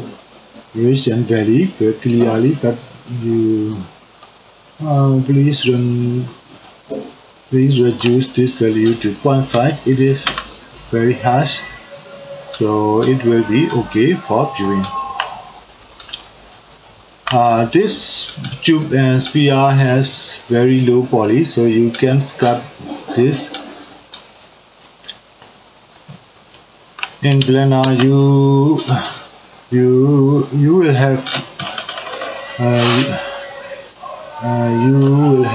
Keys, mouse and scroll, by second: 15.0-35.5 middle drag.